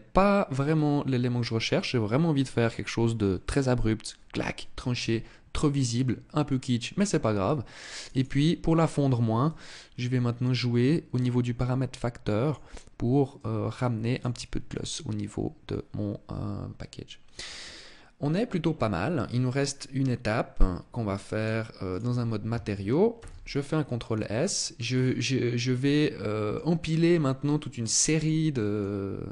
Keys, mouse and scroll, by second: 0.1-0.5 scroll down 2, 7.4 click, 7.8 click, 9.0 click, 12.8 click, 20.8 click, 22.6 ctrl+s, 23.8 middle click, 24.4-24.7 scroll down 5, 25.3 middle click, 27.7 middle click, 28.9 scroll up 2.